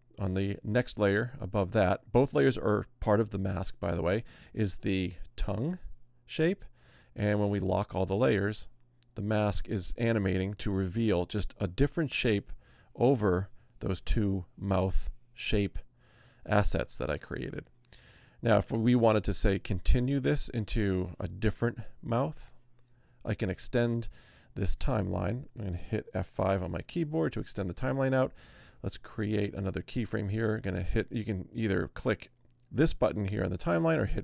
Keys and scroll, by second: 26.7 F5, 34.0 F6.